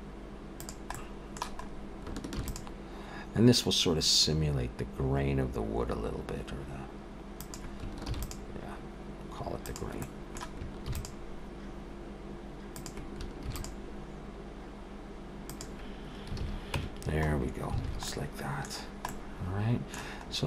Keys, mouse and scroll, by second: 0.9 middle click, 1.6 scroll up 2, 2.4 ctrl+r, 8.1 ctrl+r, 10.0 middle click, 10.9 ctrl+r, 13.5 ctrl+r, 16.4 alt+a, 16.8 Tab, 17.3-17.8 scroll down 4, 17.8 alt+a, 18.1 middle click, 18.8-19.6 scroll down 3, 19.1 middle click, 20.2-20.4 scroll up 2.